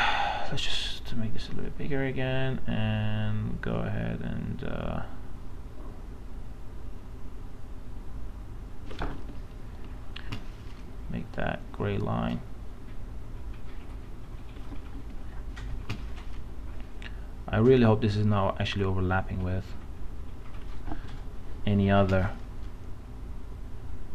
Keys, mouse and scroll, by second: 0.1 right click, 1.0-8.8 drag, 9.2-10.2 typing, 9.4 click, 21.1 space, 21.2 click, 21.6 space.